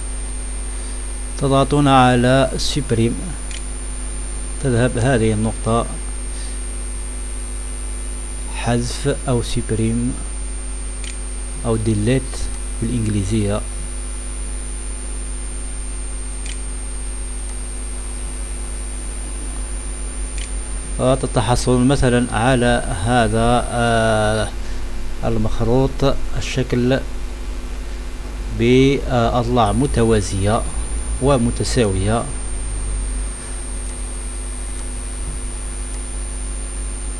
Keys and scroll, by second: 0.0-0.8 typing, 1.4 Caps_Lock, 3.5 Delete, 6.3 Delete, 6.3 Return, 7.1 *, 7.4 =, 7.7 Return, 7.9 $, 8.1 *, 8.1 Return, 8.2 Print, 8.9 Insert, 9.1 Return, 9.2 *, 10.2 Delete, 10.9 Delete, 14.0 Return, 16.5 Delete, 18.3 Delete, 18.4 Insert, 18.7 Return, 19.0 Return, 19.1 Return, 19.4 Return, 19.5 Delete, 20.4 Delete.